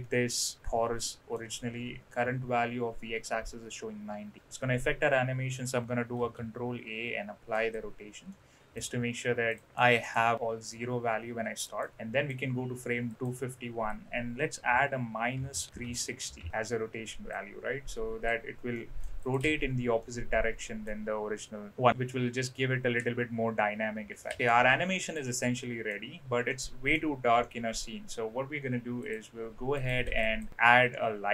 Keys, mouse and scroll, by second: 6.1 ctrl+a, 8.3 middle click, 9.5 click, 9.6 middle click, 10.1 click, 11.6 click, 11.9 click, 13.1-16.5 drag, 17.3-18.3 drag, 18.7-19.1 middle drag, 19.3 click, 19.4 space, 20.0-20.9 middle drag, 24.3 space, 24.4 middle click, 24.4 space, 25.0 click, 25.5-25.8 middle drag, 26.5 middle click, 27.4-27.7 middle drag, 29.0 click, 29.8 click, 30.0 shift+a.